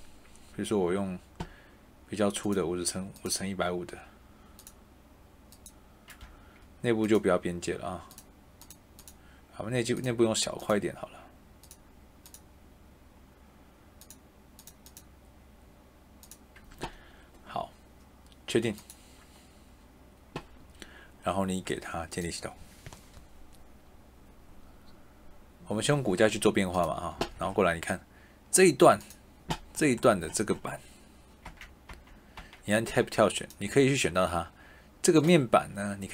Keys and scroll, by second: 6.2 Escape, 27.1 Escape, 31.4 Tab.